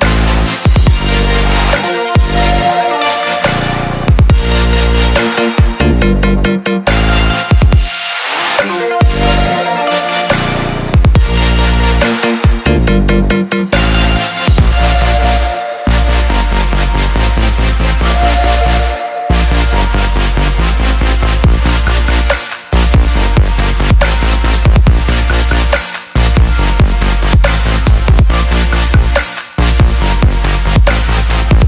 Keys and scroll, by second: 2.4 typing, 4.8 typing, 18.6-18.9 typing, 25.1 typing.